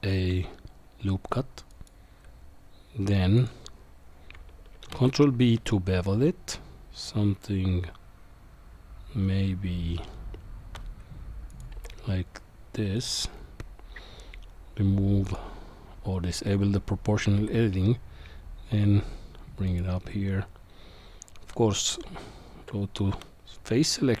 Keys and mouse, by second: 4.9 ctrl+b, 11.7 g, 15.2 click, 17.3 g, 22.0 Tab.